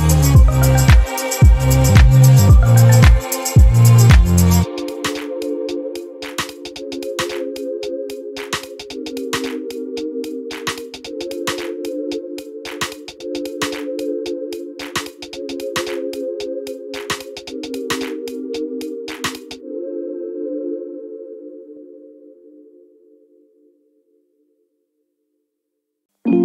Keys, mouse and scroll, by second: 0.9-3.1 drag, 3.1 click, 4.4-5.9 drag, 6.2-8.8 drag, 9.5 click, 10.8 ctrl+y, 12.8 click, 14.0 ctrl+y, 15.1 ctrl+click, 15.8 ctrl+shift+click, 17.5 ctrl+-, 19.6 click, 20.7 click, 22.5 click, 23.2 click, 24.5 click, 25.4 click.